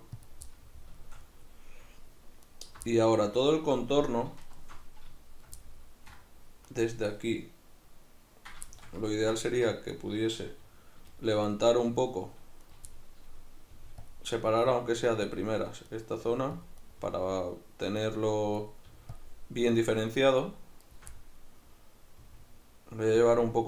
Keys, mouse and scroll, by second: 0.3 click, 0.5-2.4 middle drag, 2.4 alt+right click, 2.9-4.4 middle drag, 4.4 alt+shift+right click, 5.6-6.7 middle drag, 6.7 right click, 8.7-9.9 shift+middle drag, 9.6 1, 9.9 right click, 11.1 shift+right click, 11.6-12.6 middle drag, 12.6 right click, 12.9-14.2 middle drag, 13.7 g, 14.2 click, 14.4 right click, 14.6 g, 15.4 click, 15.9 right click, 16.2 g, 16.7 click, 16.8 right click, 17.0 g, 18.6 right click, 18.9 g, 19.2 click, 19.8 shift+right click, 20.0 shift+right click, 20.4 shift+right click, 20.8 shift+right click, 21.1-23.3 middle drag, 22.2 g, 23.3 click, 23.5-23.6 middle drag.